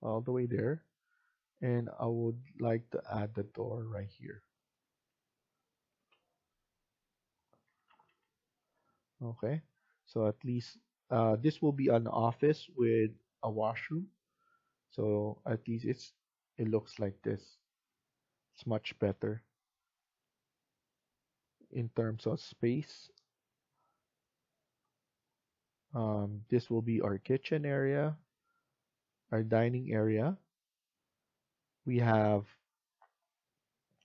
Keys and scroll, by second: 0.1 Escape, 2.3 Escape, 7.5 Escape, 7.7 Escape, 7.9 Escape.